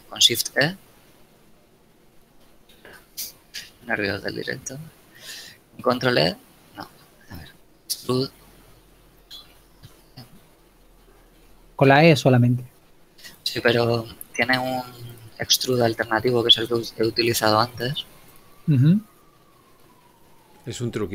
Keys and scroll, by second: 0.3 shift+e, 3.0 ctrl+z, 4.3 ctrl+shift+z, 6.0 ctrl+e, 10.0 alt+e.